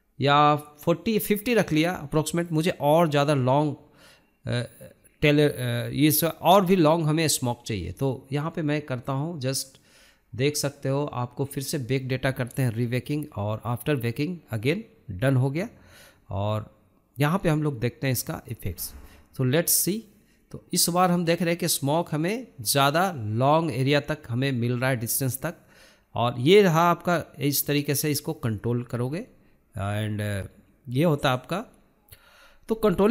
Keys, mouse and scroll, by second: 1.8-2.5 scroll up 1, 2.5-14.0 drag, 14.0-14.7 scroll down 8, 14.7-17.2 scroll up 14, 17.2-24.5 drag, 25.4-28.0 drag, 28.1-28.6 scroll down 5, 29.3 scroll down 2, 31.9-33.1 drag.